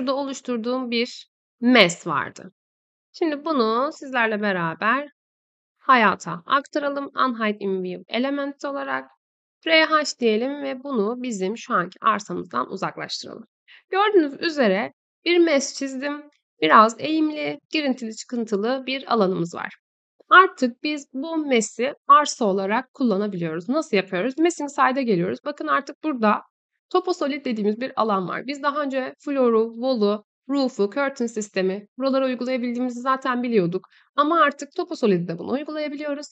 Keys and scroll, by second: 8.8-9.6 typing.